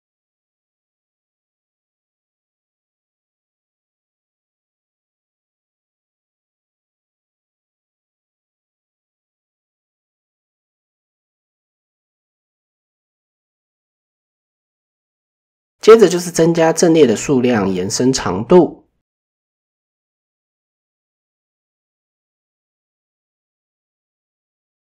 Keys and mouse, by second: 6.4-7.4 drag, 8.3 Tab, 12.3 click, 12.6 click, 13.1 shift+middle drag, 17.4 shift+middle drag, 18.4 click, 18.7 click, 19.6 shift+middle click, 21.2-21.8 shift+middle drag.